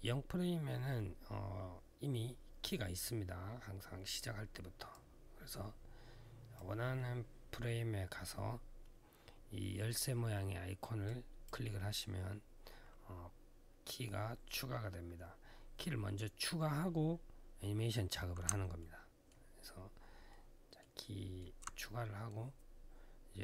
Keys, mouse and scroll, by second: 4.7 click, 10.8 click, 18.6 alt+middle click, 19.3-19.7 alt+scroll down 1, 20.1 alt+middle click, 20.7 alt+middle click.